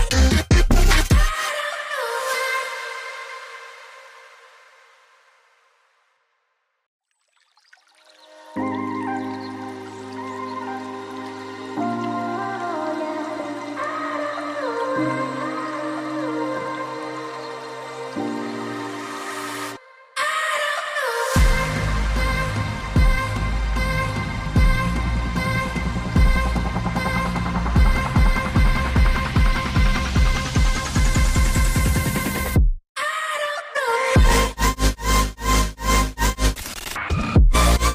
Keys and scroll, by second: 3.4 ctrl+z, 32.9 Tab, 33.8-34.6 typing, 35.9 6.